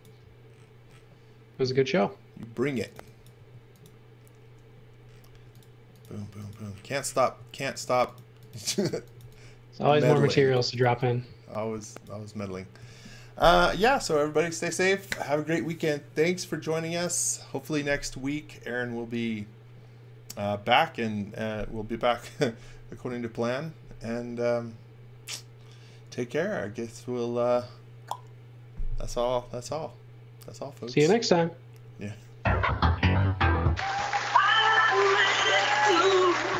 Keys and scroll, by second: 2.5-3.4 typing, 5.2 n, 7.3 space, 8.9-11.3 typing, 12.7 x.